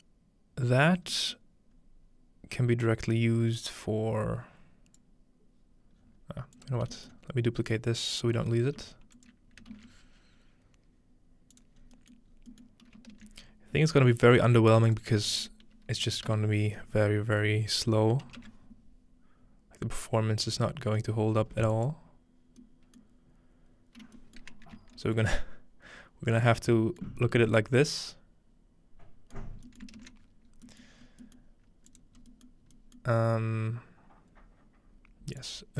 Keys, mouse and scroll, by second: 3.3-3.7 scroll up 2, 3.6-5.9 drag, 6.0 scroll down 2, 6.6 click, 6.8 scroll down 2, 7.7 click, 8.8-10.9 drag, 8.8-9.7 typing, 11.5-13.3 drag, 11.8-13.6 scroll up 3, 12.0-14.2 middle drag, 14.9-17.2 drag, 20.5-22.5 middle drag, 21.7-23.0 drag, 22.6 middle click, 24.8 z, 27.2 middle click, 27.3-29.4 scroll up 1, 29.4-31.3 scroll up 1, 31.3 ctrl+space, 33.3-35.3 middle drag, 33.3-35.3 scroll up 1.